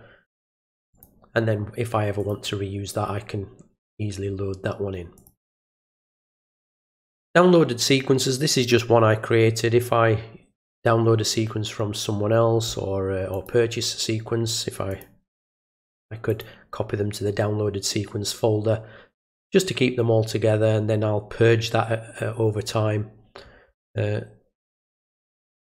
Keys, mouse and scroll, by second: 0.9 click, 2.2 click, 5.2 click, 13.3 click, 14.9 click, 16.3 click.